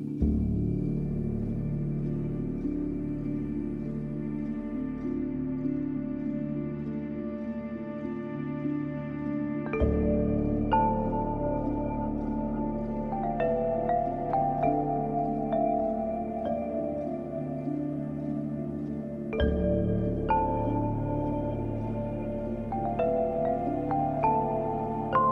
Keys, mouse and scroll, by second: 1.2 scroll down 1, 2.6 scroll up 1, 3.6 click, 5.2 ], 5.2 click, 5.5 [, 5.8 click, 7.7 scroll down 1, 8.4 scroll up 1, 9.2-11.9 drag, 11.9 scroll down 1, 12.8 scroll up 1, 13.0-14.1 scroll down 1, 14.1-14.7 scroll down 1, 14.7 scroll up 1, 15.9 click, 17.8 scroll up 1, 20.4 scroll down 1.